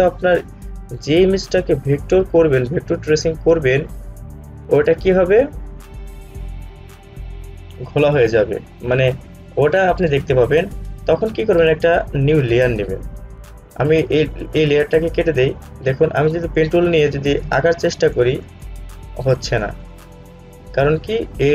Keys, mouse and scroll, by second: 12.5 click, 15.2 click.